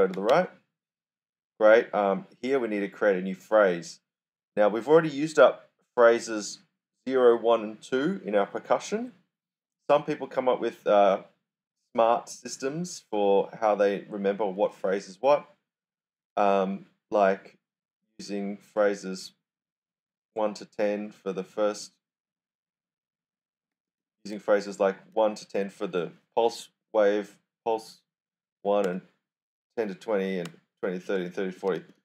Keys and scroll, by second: 0.0-0.7 typing, 23.4-24.3 typing, 28.8 d, 30.4-32.0 typing.